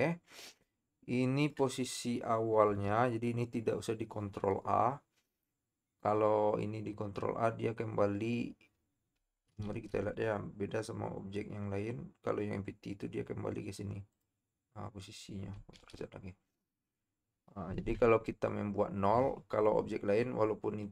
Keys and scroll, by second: 2.9 KP_7, 9.7 ctrl+a, 15.8 ctrl+z.